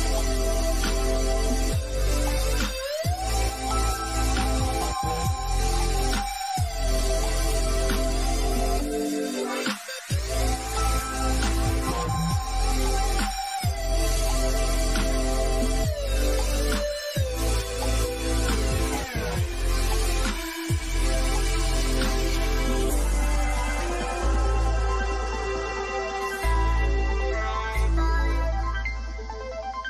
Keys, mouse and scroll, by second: 0.9 click, 1.8-4.7 middle drag, 4.7 click, 5.3-6.4 scroll down 1, 6.4-7.8 middle drag, 7.8 click, 14.3-14.7 scroll up 1, 17.9 click, 21.3 scroll down 1, 21.6 middle click, 22.0 scroll up 1, 24.0 scroll down 1, 24.8-25.6 scroll up 1, 26.7-27.4 scroll up 1, 29.5 click.